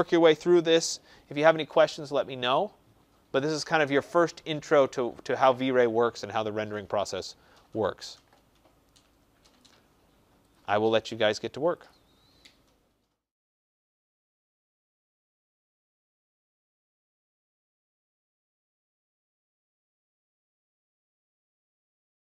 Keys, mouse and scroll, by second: 9.5 click, 10.4 click, 11.7 click.